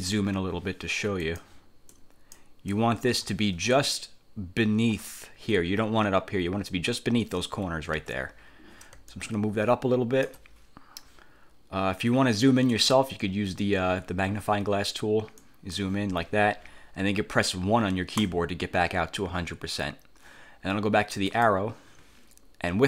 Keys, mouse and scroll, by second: 1.4 click, 2.0 click, 3.2 F1, 4.0-7.6 drag, 8.1 ctrl+z, 9.2-10.6 ctrl+drag, 12.8 click, 15.5 click, 18.3 1, 21.4 click.